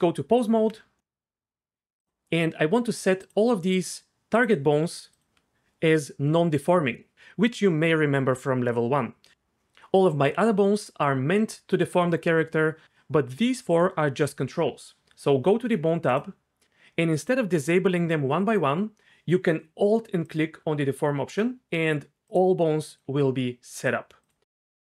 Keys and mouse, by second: 2.0 click, 3.2 shift+click, 5.1 shift+click, 20.2 alt+click, 22.3 click, 22.9 click.